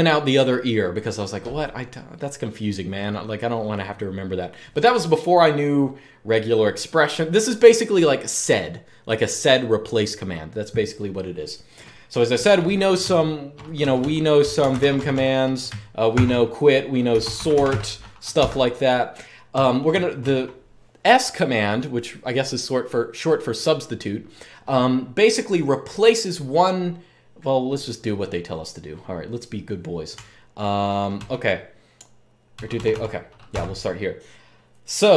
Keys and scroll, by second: 12.7-19.8 typing, 21.2-21.9 typing, 29.9-30.3 j, 30.9 k, 32.3 k, 32.5 k, 32.6 k, 33.2 0.